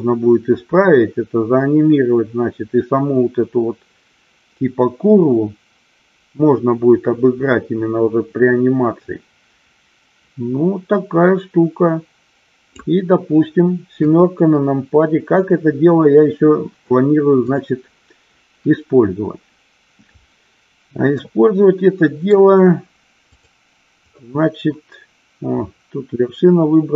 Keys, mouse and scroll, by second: 14.0 KP_7, 17.7 click, 21.3-22.4 middle drag, 23.4 click.